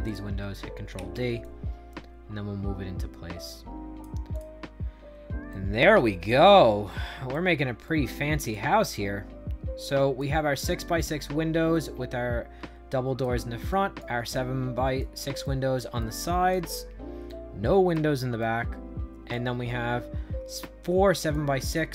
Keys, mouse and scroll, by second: 0.0 click, 0.9 ctrl+d, 1.3-3.9 drag, 4.2 click, 4.8 middle click, 5.4 right click, 6.2 middle click, 6.8 right click, 7.8 shift+right click, 8.7-10.1 right drag, 11.6-13.1 right drag, 13.6 right click, 14.2 shift+right click, 15.3 right click, 15.9 right click, 17.2 shift+right click, 18.3 right click, 19.5 middle click, 20.5 shift+right click.